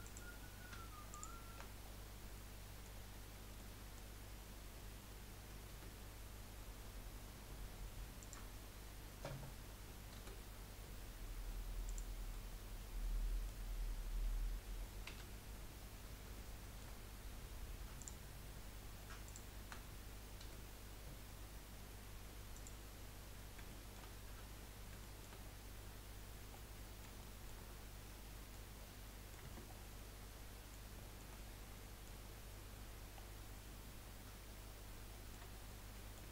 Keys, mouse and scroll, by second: 0.0 click, 1.1 shift+click, 1.8-2.1 scroll down 6, 2.3 middle click, 3.0-3.4 scroll up 3, 3.6 middle click, 4.1 scroll up 1, 5.7 Delete, 10.1 Delete, 12.3-15.1 middle drag, 15.1 1, 15.9-16.3 scroll up 1, 16.3 shift+middle click, 17.1 scroll up 1, 18.1 click, 19.2 shift+click, 20.4 Delete, 23.1-23.7 scroll down 2, 23.7-25.4 shift+middle drag, 25.4-26.5 scroll up 5, 26.5-27.6 middle drag, 27.6-28.0 scroll up 2, 28.0 middle click, 28.7-29.0 scroll down 4, 29.0 middle click, 29.4 Tab, 29.8 scroll down 2, 30.0-31.5 middle drag, 31.5 scroll down 1, 31.7-32.3 middle drag, 32.3 scroll down 1, 33.3-33.6 scroll down 5, 34.0-34.7 scroll up 1, 34.7-35.1 scroll up 2, 35.1-35.5 shift+middle drag, 35.5 scroll up 1, 35.7-36.3 middle drag.